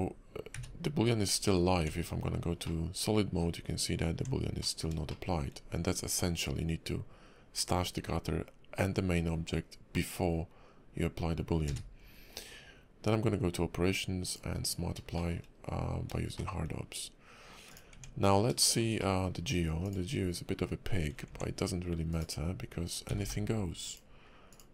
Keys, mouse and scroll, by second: 0.5 q, 1.8 Tab, 2.3-2.6 scroll down 3, 2.6 middle click, 3.5 scroll up 3, 4.1 Tab, 4.6 middle click, 5.1 shift+middle click, 11.6 q, 15.1 shift+middle click, 15.4 scroll up 2, 16.3 shift+middle click, 17.7 click, 17.9 Tab, 18.6 shift+middle click, 19.0 middle click, 19.4 scroll up 1, 19.8 click, 21.3 Tab, 22.1 click, 23.1 g, 24.5 click.